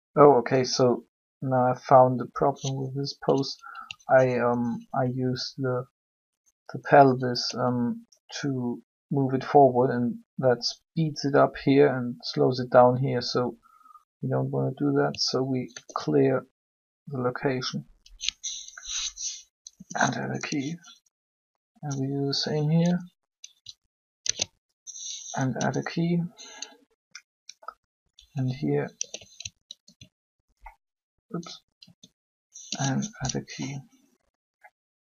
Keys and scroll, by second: 15.5 alt+g, 19.5 i, 22.8 i, 24.1 alt+g, 25.5 i, 28.8 alt+g, 29.6 alt+r, 31.9 r, 32.5 i.